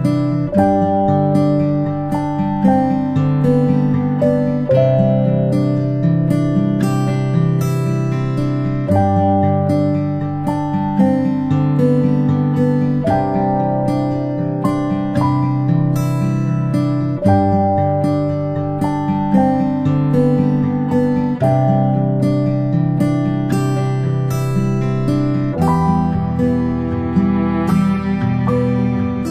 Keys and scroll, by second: 0.5 ctrl+[, 1.1 ctrl+], 1.5 ctrl+], 1.9 ctrl+shift+[, 2.3 ctrl+], 8.3 ctrl+shift+[, 8.8 ctrl+], 9.2 ctrl+], 15.3 ctrl+z, 18.5-19.0 space, 19.3 space, 20.2 p.